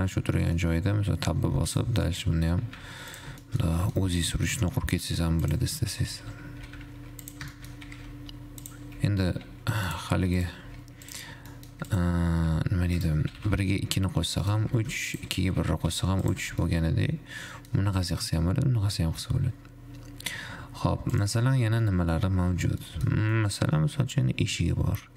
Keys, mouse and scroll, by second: 0.6-0.9 middle drag, 0.9-1.5 scroll up 1, 1.5 Tab, 2.0 click, 2.4 middle click, 2.6 e, 3.6 shift+middle click, 4.0-4.5 scroll down 3, 4.5 g, 5.0 e, 6.4 ctrl+z, 6.9 e, 9.4 e, 10.6 shift+click, 11.0 f, 11.9 middle click, 12.1 click, 12.9 g, 13.5 g, 15.0 ctrl+shift+Tab, 15.6 g, 16.7 Tab, 17.0-20.0 middle drag, 21.5 click, 22.1 middle click, 22.9 scroll up 2, 23.1-25.1 middle drag.